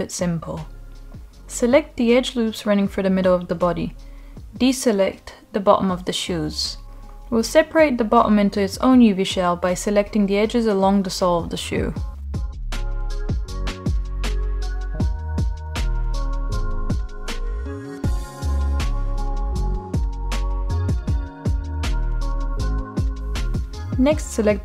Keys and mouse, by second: 0.5-0.9 middle drag, 1.7 shift+click, 1.9 shift+click, 2.6-3.1 middle drag, 3.8-4.8 ctrl+drag, 5.6-6.2 ctrl+drag, 7.0-7.5 middle drag, 7.7-8.0 shift+middle drag, 10.8-12.1 shift+drag, 12.8-13.6 middle drag, 14.1 shift+click, 15.4 shift+click, 16.3-16.7 middle drag, 17.5-18.6 shift+drag, 19.3 shift+click, 19.5 shift+click, 20.0-20.7 middle drag, 21.7 shift+click, 22.0 middle click.